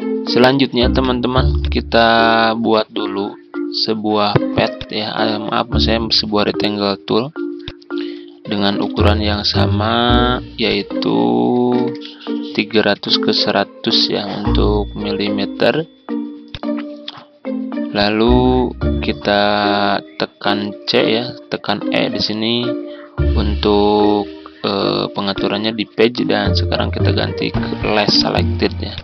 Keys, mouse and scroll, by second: 8.4-9.4 typing, 10.6 click, 11.5-11.9 typing, 12.9 Return, 16.4-19.0 drag, 20.9 c, 21.7 c, 24.0 e, 25.3-29.0 drag.